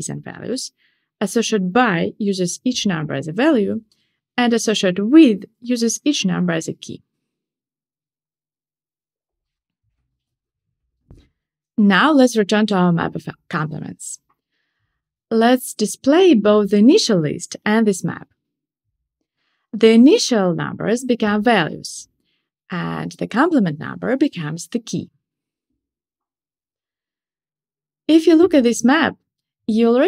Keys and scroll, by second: 14.1 Tab, 16.5 shift+super+Return, 17.7 Tab, 20.7 Tab, 20.8 Return, 22.7 Return.